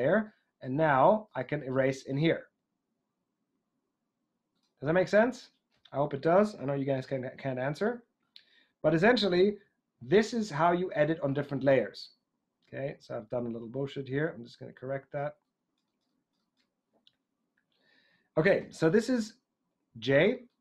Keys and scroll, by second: 18.5 j.